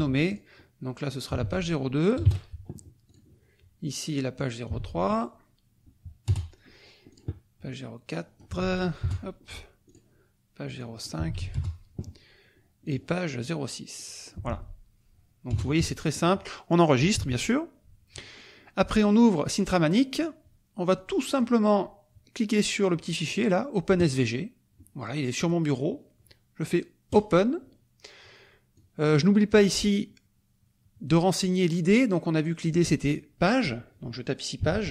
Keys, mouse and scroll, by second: 0.3 ctrl+click, 1.1 click, 1.4 ctrl+v, 2.2 KP_0, 2.7 KP_2, 3.1 click, 4.3 click, 4.8 ctrl+v, 6.3 Return, 7.1 click, 8.1 click, 8.6 ctrl+v, 9.0 ctrl+Return, 9.9 click, 10.8 click, 11.3 ctrl+v, 11.5 ctrl+Return, 12.8 click, 13.9 click, 15.5 Return, 16.1 click, 17.1 ctrl+s, 19.5 click, 21.0 click, 23.9 click, 25.4 click, 27.1 click, 28.7 click, 32.6 click, 34.3-34.9 typing.